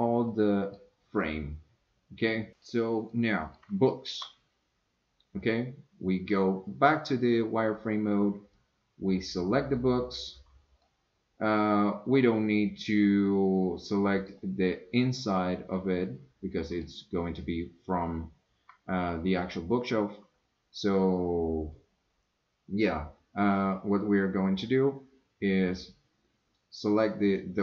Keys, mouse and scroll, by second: 0.3 middle click, 1.2-2.6 middle drag, 3.1 middle click, 3.9 shift+middle click, 5.4 click, 8.6-9.7 drag, 10.9 scroll down 1, 10.9-14.3 middle drag, 15.7-16.8 middle drag.